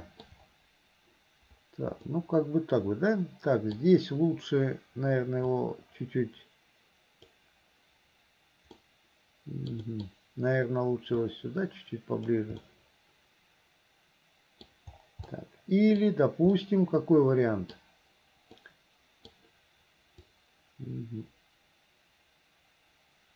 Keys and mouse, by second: 2.1-3.9 drag, 2.1-3.9 right drag, 5.5-7.3 drag, 9.0 click, 9.0 right click, 9.9 click, 11.3-12.4 drag, 12.8-14.8 middle drag, 15.5 middle click, 16.6-17.8 middle drag, 18.8 middle click, 20.4-23.3 drag.